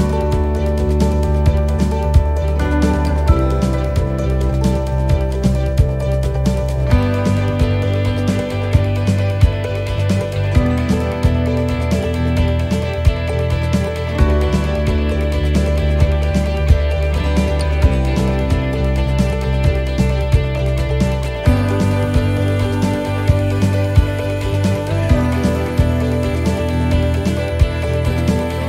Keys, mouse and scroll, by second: 2.5 click, 4.4-4.9 scroll down 2, 4.9 shift+middle click, 6.4 shift+middle click, 6.4 scroll down 1, 6.6 scroll down 3, 6.7 shift+middle click, 7.4 shift+middle click, 7.4 shift+scroll up 1, 8.2 scroll down 1, 8.5 shift+middle click, 9.2 shift+middle click, 9.7-10.1 scroll up 3, 10.2 shift+middle click, 10.6 scroll up 1, 11.0 shift+middle click, 11.6 scroll up 1, 12.0 shift+middle click, 12.3-12.7 scroll down 2, 12.8 shift+middle click, 13.8 right click, 15.7 shift+right click, 16.7 shift+d, 18.1 shift+middle click, 18.4 scroll down 2, 19.5 click, 26.8 shift+middle click, 27.2-28.2 scroll up 6, 27.7 shift+middle click.